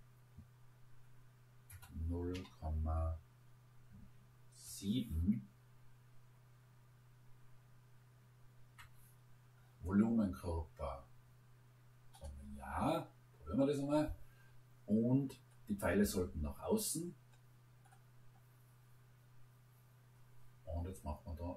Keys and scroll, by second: 1.7 0, 2.3 ., 4.7 7, 8.6 Return.